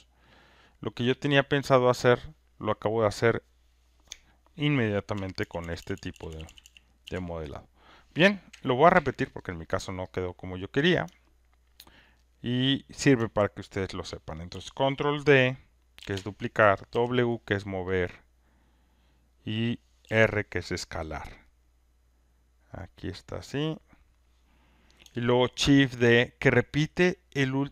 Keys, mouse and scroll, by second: 0.9 click, 5.4 ctrl+z, 5.6 ctrl+z, 5.7 ctrl+z, 5.9 ctrl+z, 6.1 ctrl+z, 6.3 ctrl+z, 8.9 Delete, 10.1 click, 12.0 alt+middle click, 12.4 alt+middle click, 13.9 alt+middle click, 15.9 ctrl+d, 19.5 click, 20.7-22.6 drag, 24.1 click.